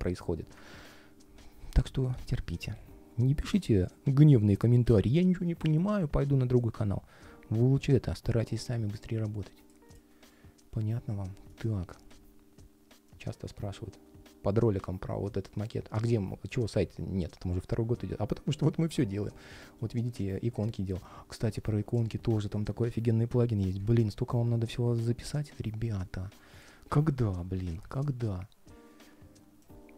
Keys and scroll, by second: 19.4 ctrl+shift+3, 20.6 ctrl+shift+3.